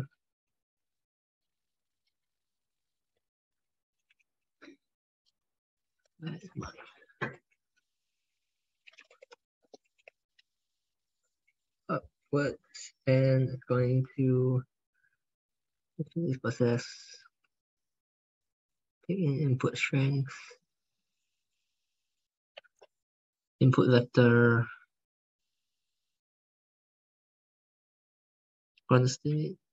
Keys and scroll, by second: 0.5 ctrl+Left, 0.8 ctrl+Left, 3.6 ctrl+Right, 4.0 alt+Tab, 7.1 ctrl+f.